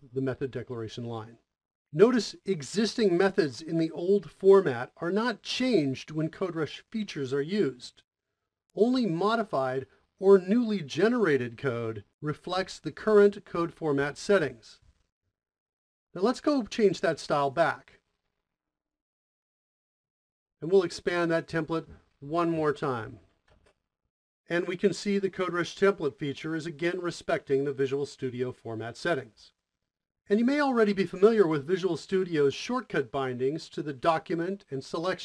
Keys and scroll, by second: 22.2 Return, 22.9-28.0 typing, 29.0 Return, 30.2 typing.